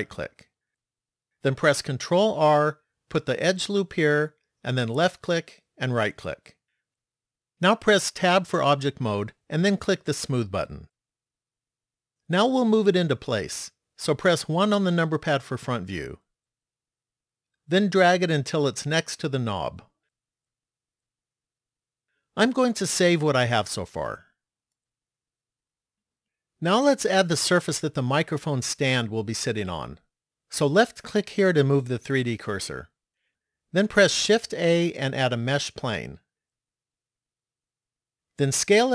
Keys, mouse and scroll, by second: 2.0 ctrl+r, 8.2 Tab, 10.8 click, 14.7 KP_1, 18.3 click, 23.7 click, 30.8 click, 34.4 shift+a.